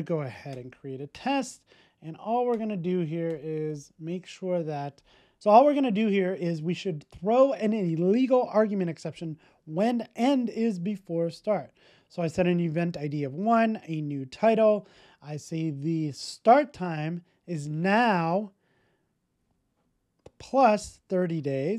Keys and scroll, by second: 3.9 super+v, 4.2 super+s.